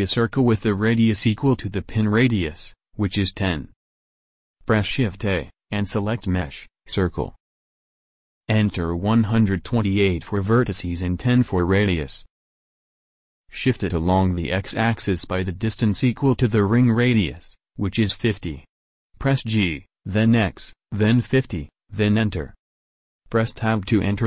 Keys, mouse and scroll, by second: 5.3 shift+a, 8.7-10.0 middle drag, 10.0 click, 19.6 g, 23.6 Tab.